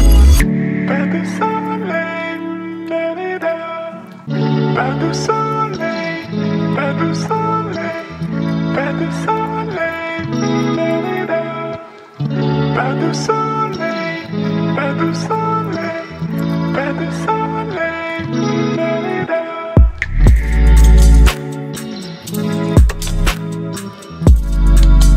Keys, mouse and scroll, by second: 1.0-3.4 drag, 3.4-6.7 alt+drag, 6.7-10.6 alt+drag, 10.6-13.9 alt+drag, 18.4 click, 20.6 ctrl+g, 22.3 click, 23.3-25.1 typing.